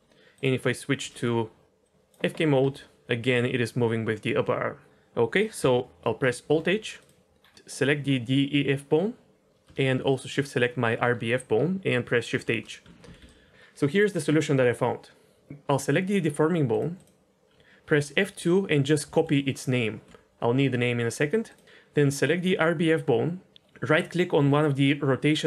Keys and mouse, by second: 1.0 n, 1.8 drag, 2.6 r, 6.4 alt+h, 6.9 click, 7.3-8.6 middle drag, 10.1 shift+click, 12.3 shift+h, 13.1-13.5 d, 13.2 right click, 17.8 F2, 21.4 click.